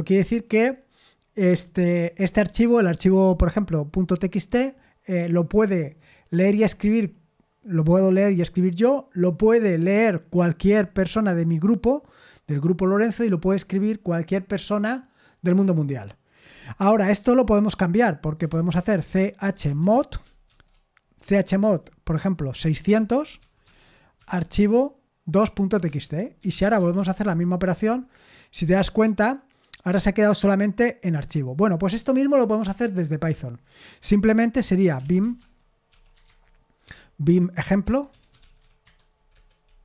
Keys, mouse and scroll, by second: 18.1-24.8 typing, 25.7 Return, 26.1-27.5 typing, 34.9-39.8 typing, 36.2 Tab.